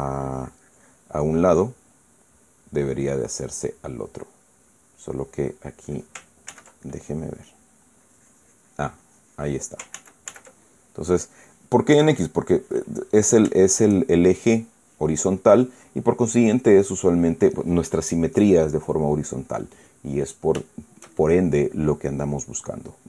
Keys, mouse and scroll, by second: 2.0-6.7 middle drag, 7.2 ctrl+z, 7.6 ctrl+middle click, 8.7 click, 9.7 click, 10.7 ctrl+z, 11.5 ctrl+middle click, 12.9 click, 13.8 middle click, 14.3 shift+middle click, 16.3 click, 17.3 click, 20.2-21.1 middle drag, 21.4 shift+middle click.